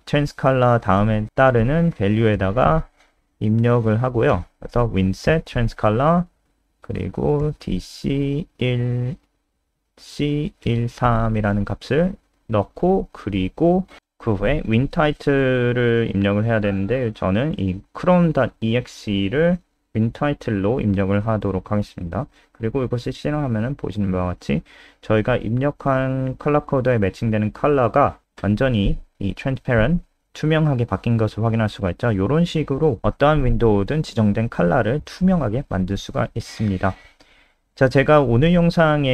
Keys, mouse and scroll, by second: 2.8 click, 3.6 Up, 3.7 Up, 4.1 Down, 4.3 Up, 4.7 Home, 5.2 ctrl+shift+End, 6.0-13.5 typing, 15.2 click, 18.4 click, 19.3 ctrl+c, 19.7 click, 21.7 ctrl+v, 21.8 ctrl+s, 22.0 click, 22.2 F5, 23.3 click, 37.0-37.5 scroll down 3.